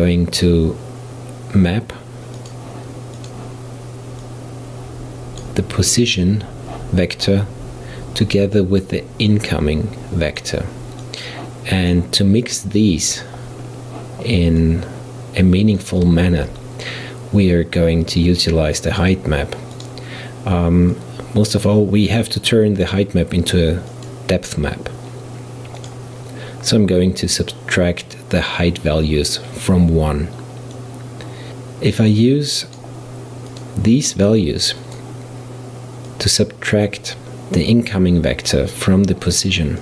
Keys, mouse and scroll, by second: 4.3 click, 9.4-11.2 drag, 12.5 click, 13.7-14.6 scroll up 2, 14.6 click, 16.3 shift+a, 21.0 click, 24.0-28.1 drag, 29.8 click, 30.1-31.4 drag, 32.0 click, 33.5-36.3 drag.